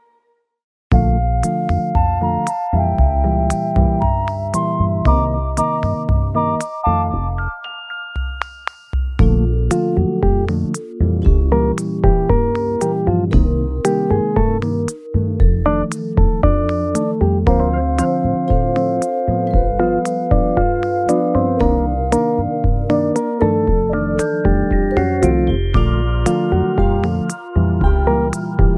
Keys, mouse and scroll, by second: 2.8 s, 3.9 g, 4.1 z, 9.6 x, 11.0 click, 11.5 middle click, 12.3-12.9 scroll down 2, 13.3 scroll, 13.3 alt+z, 13.7-14.5 alt+scroll up 1, 15.5 shift+click, 15.7 shift+click, 16.0 shift+click, 16.1 shift+middle click, 17.8 x, 19.3 KP_1, 21.7 w, 21.7 g, 23.6-24.0 scroll down 3, 24.0 scroll up 1, 24.7 middle click, 24.7 alt+z, 25.1 alt+middle click, 25.7 scroll down 1, 25.9-26.8 scroll up 2, 27.8 shift+click.